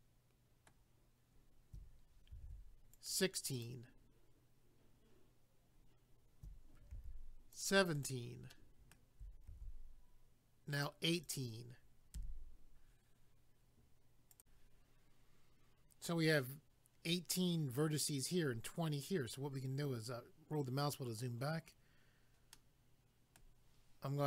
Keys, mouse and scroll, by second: 2.3 ctrl+r, 2.9 click, 3.1 click, 3.6 click, 3.7 click, 6.9 ctrl+r, 7.5 click, 7.7 click, 8.0 click, 8.1 double click, 8.5 middle click, 9.5 ctrl+r, 10.7 click, 10.9 click, 11.1 click, 11.3 double click, 12.1 a, 14.3 click, 14.4 click, 19.1-19.4 scroll down 1, 22.5 middle click.